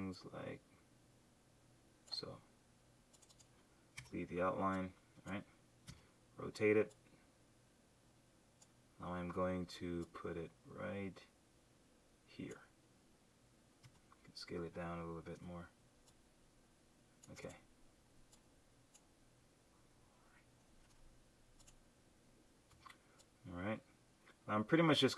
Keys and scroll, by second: 5.8 q, 9.3 v, 13.8 q, 20.8 super+z, 22.7 v.